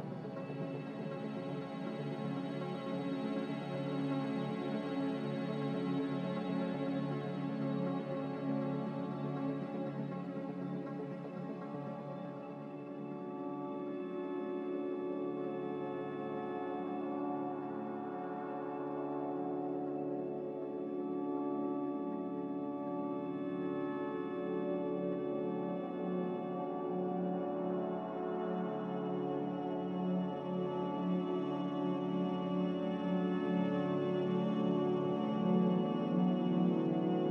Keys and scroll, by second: 4.5-5.2 typing, 8.3-11.8 typing, 18.3 n, 31.8 ctrl+z, 36.0 a.